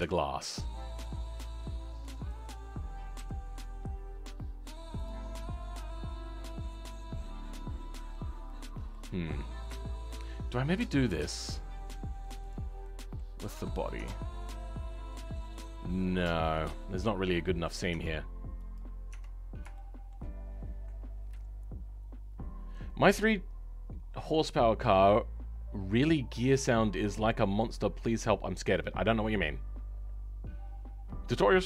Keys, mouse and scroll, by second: 0.0-1.2 shift+middle drag, 1.2-2.2 scroll down 4, 2.2 click, 3.1 g, 5.2-5.6 scroll up 4, 5.6-12.3 middle drag, 12.3 click, 12.7 middle click, 13.4 Tab, 14.5-19.3 middle drag, 19.3-19.7 scroll up 2, 19.7-31.6 shift+middle drag.